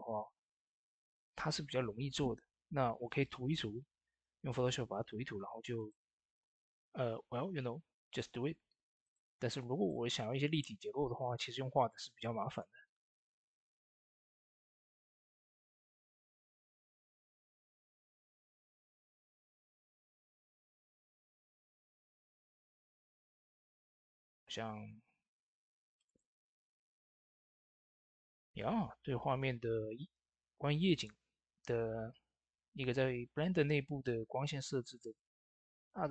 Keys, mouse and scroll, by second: 1.3 s, 5.6 s, 5.6 click, 7.9 click, 12.3 click, 12.3 click, 13.7 Tab, 15.6-18.7 drag, 19.5 click, 19.6 Tab, 22.5 Tab, 22.5 click, 27.5 ctrl+s, 35.0 ctrl+s, 35.0 click.